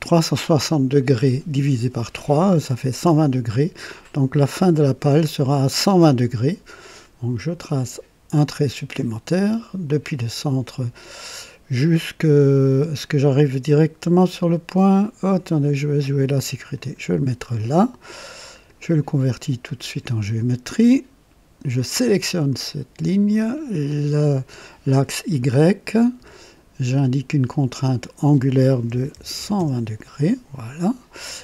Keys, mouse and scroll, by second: 7.7 click, 9.8 click, 16.7 click, 17.5 right click, 18.5 click, 19.6 click, 21.7 click, 23.8 click, 27.4 click, 28.8 KP_1, 29.1 KP_2, 29.3 KP_0, 29.5 KP_0, 29.7 Return.